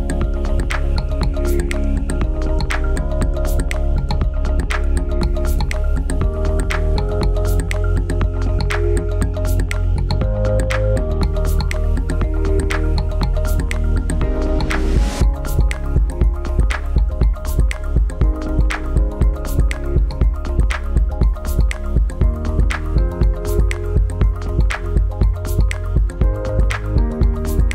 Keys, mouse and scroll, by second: 2.4 click.